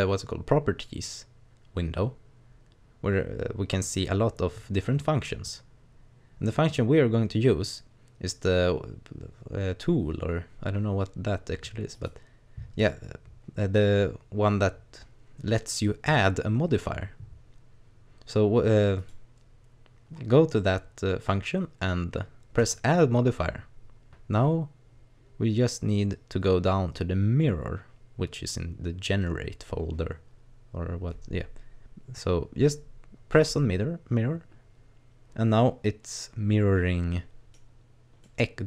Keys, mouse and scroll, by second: 11.9 click, 19.0 click, 22.6 click, 34.9-35.6 scroll up 1, 35.6 middle click, 38.3 middle click.